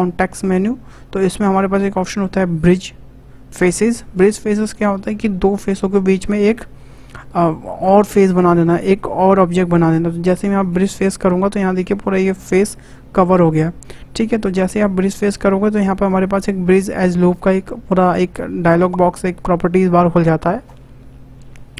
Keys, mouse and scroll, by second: 17.1-20.2 drag.